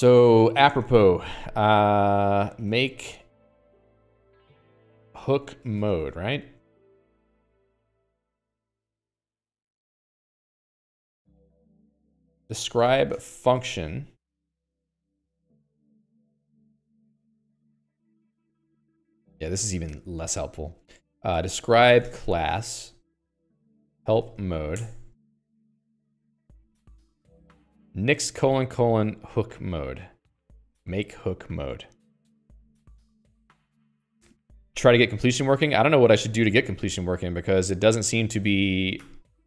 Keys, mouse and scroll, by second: 0.0 alt+x, 1.1 Return, 2.6-4.1 typing, 5.3-7.0 typing, 9.4 super+click, 35.5 super+click, 36.5 click, 36.6 Escape, 37.0-39.4 typing.